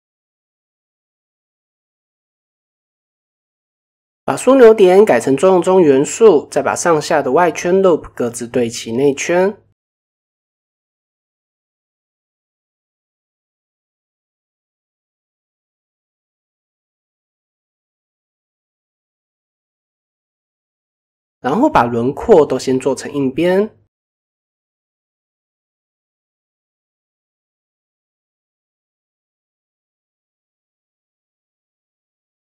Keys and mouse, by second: 0.5-0.9 middle drag, 1.3 KP_1, 2.0 middle click, 3.2-4.0 drag, 7.3 shift+click, 8.4 s, 11.5 shift+click, 12.3 s, 13.8 middle click, 14.2 middle click, 15.0-15.7 drag, 16.3 alt+click, 17.6 click, 19.1 click, 19.5 middle click, 21.2 alt+click, 22.3 alt+click, 23.2 click, 23.9 middle click, 24.9 alt+click, 25.9 click, 28.9 click, 29.9 middle click, 30.7 KP_1, 32.2 KP_7.